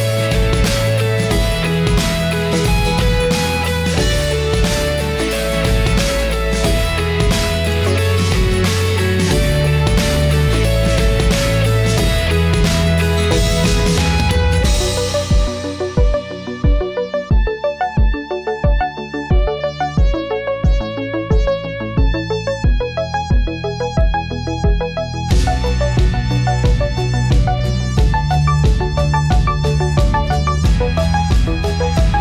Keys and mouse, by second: 8.8-10.3 drag, 16.0-18.4 drag, 19.6 middle click, 21.0-22.6 drag, 23.4 click, 23.6-25.4 middle drag, 25.8 middle click, 27.7-30.0 middle drag, 30.6 middle click.